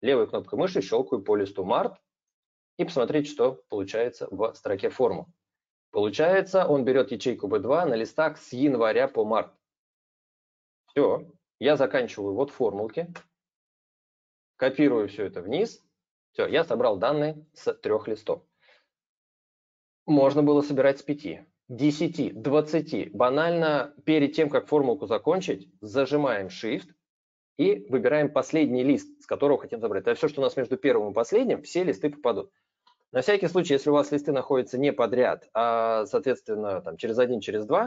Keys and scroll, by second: 13.0 ctrl+Return.